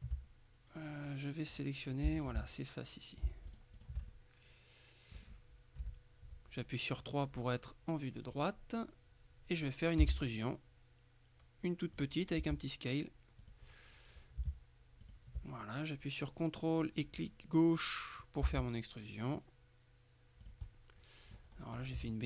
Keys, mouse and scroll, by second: 1.6 right click, 2.3 shift+right click, 3.6 shift+right click, 5.9 KP_3, 10.1 e, 12.0 click, 12.5 s, 13.5 click, 15.1 ctrl+click, 18.5 s, 20.5 click, 21.6-22.2 scroll up 1.